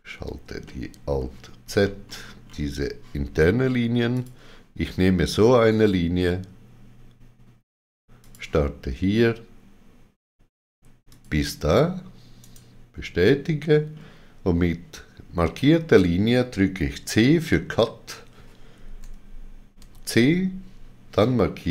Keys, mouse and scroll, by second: 0.6 shift+middle click, 1.6-2.0 scroll up 2, 4.1 click, 8.2 click, 11.1 click, 12.4 right click, 13.2 middle click, 19.7 c.